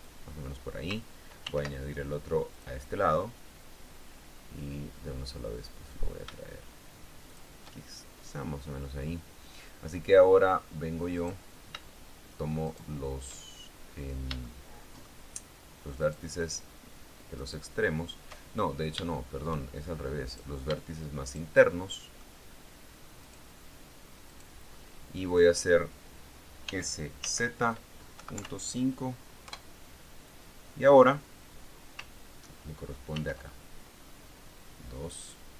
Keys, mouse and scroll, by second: 1.8 ctrl+r, 2.8 click, 7.6 shift+click, 8.8-9.4 scroll down 1, 9.4-9.7 scroll up 1, 11.5 right click, 13.0 shift+right click, 14.2-14.6 scroll down 2, 14.8 shift+middle click, 16.4 shift+right click, 17.7 shift+right click, 19.4 shift+middle click, 20.6 right click, 21.6 shift+right click, 22.1 shift+middle click, 23.6 shift+right click, 24.6 shift+right click, 25.1 shift+middle click, 27.0 s, 27.6 z, 28.5 KP_Decimal, 28.7 KP_5, 29.8 KP_Enter, 33.5 ctrl+r, 34.4 scroll up 1.